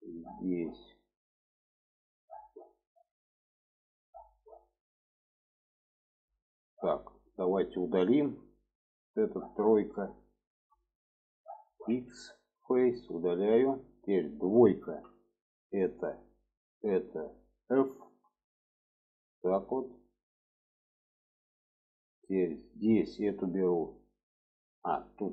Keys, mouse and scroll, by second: 0.4 shift+middle click, 1.1 middle click, 1.8 shift+middle click, 2.5 middle click, 2.9 shift+middle click, 4.8-5.1 shift+middle drag, 5.5-5.9 middle drag, 6.6 middle click, 8.2 3, 8.9 click, 11.9 x, 14.9 2, 15.4 click, 16.7 shift+click, 18.1 f, 18.9-21.7 middle drag, 22.6 click, 23.2-25.3 middle drag.